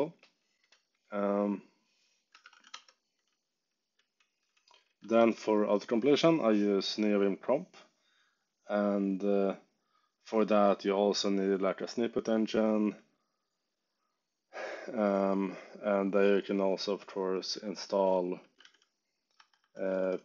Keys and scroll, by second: 2.1-3.2 typing, 4.9 z, 17.4-20.2 typing, 19.3 Escape.